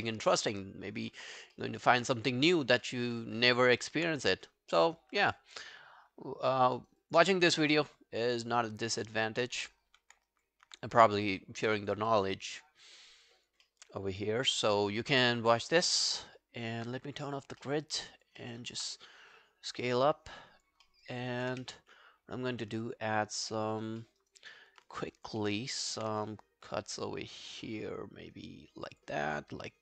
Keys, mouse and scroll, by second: 0.1 alt+middle click, 0.4 space, 1.1 space, 1.6 alt+middle click, 1.9 alt+right click, 2.2 alt+click, 2.6 alt+middle click, 2.9 alt+right click, 3.1 alt+click, 3.5 alt+middle click, 3.8 alt+right click, 6.5 alt+middle click, 6.8 alt+right click, 7.0 alt+click, 7.3 alt+middle click, 7.5 alt+right click, 8.3 alt+middle click, 8.5 alt+right click, 8.7 alt+click, 9.1 alt+middle click, 9.3 alt+right click, 9.9 r, 10.3 alt+click, 12.1 alt+middle click, 12.4 alt+right click, 12.6 alt+click, 13.7 alt+middle click, 14.0 alt+scroll down 4, 14.2 alt+click, 14.6 alt+middle click, 17.6 alt+middle click, 17.9 alt+right click, 18.1 alt+click, 18.4 alt+middle click, 18.7 alt+right click, 20.9 alt+middle click, 21.1 alt+right click, 21.4 alt+click, 23.5 alt+middle click, 23.8 alt+right click, 24.0 alt+middle click, 24.2 alt+right click, 24.4 alt+click, 25.4 alt+middle click, 25.6 alt+right click, 25.9 alt+click, 29.0 ctrl+click, 29.6 ctrl+click.